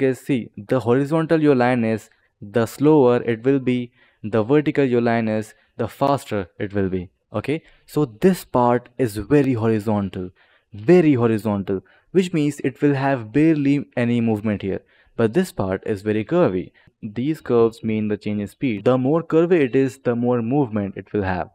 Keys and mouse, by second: 16.9 click.